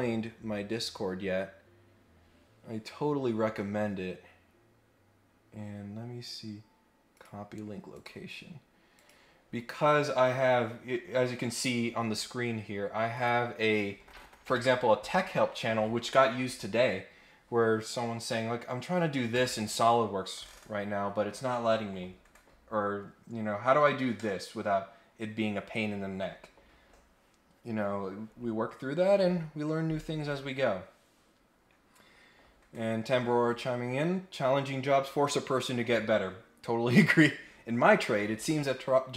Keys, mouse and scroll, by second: 7.1 click, 7.9 click, 8.9 click, 10.6-13.0 scroll down 1, 13.1 click.